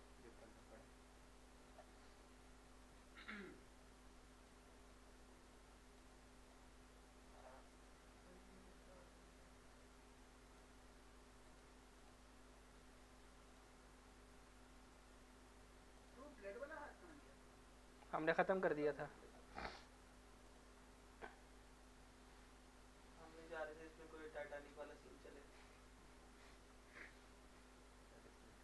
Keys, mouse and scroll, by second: 2.0 middle click, 2.6 scroll up 1, 3.0 middle click, 3.4-4.4 scroll down 1, 4.4 click, 5.5 click, 6.5 click, 7.7 middle click, 8.1 scroll up 1, 8.7 middle click, 9.7 middle click, 10.5 click, 10.6 click, 16.0 click, 23.6-28.6 drag.